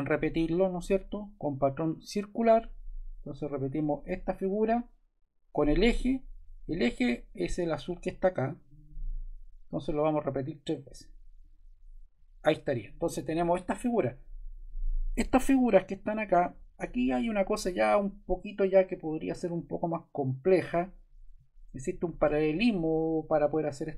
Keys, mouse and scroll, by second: 0.0-1.1 drag, 2.3 click, 3.4 click, 3.6-4.7 drag, 7.4-8.5 drag, 8.7-9.9 drag, 11.4-12.5 drag, 14.0-15.1 drag, 16.0-17.1 drag.